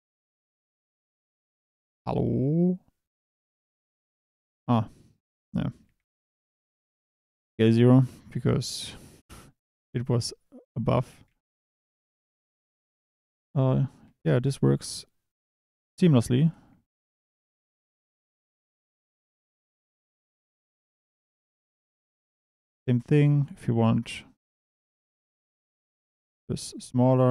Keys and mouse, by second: 4.3 Escape, 5.4-7.1 typing, 7.3 KP_Enter, 9.1 KP_7, 10.0 g, 11.0 click, 11.3 Tab, 11.5 click, 12.0 Tab, 12.7 click, 14.0 e, 14.4 e, 15.9 click, 16.6 shift+d, 17.4 click, 17.6 e, 18.7 click, 18.9-22.1 typing, 19.3 click, 20.0 click, 21.7 click, 24.5 click, 26.8-27.3 drag.